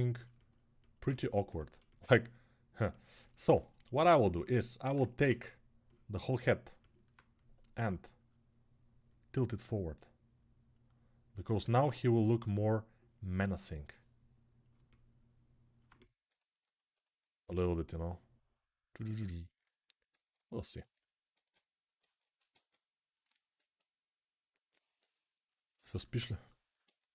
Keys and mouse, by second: 0.3 alt+click, 0.9-5.8 middle drag, 5.0 ctrl+Tab, 5.8-15.8 drag, 15.8-26.7 alt+shift+middle drag, 19.9 alt+q, 21.1 Tab, 21.8 Tab, 23.3-24.3 ], 25.9 alt+q, 26.7-27.1 shift+right drag.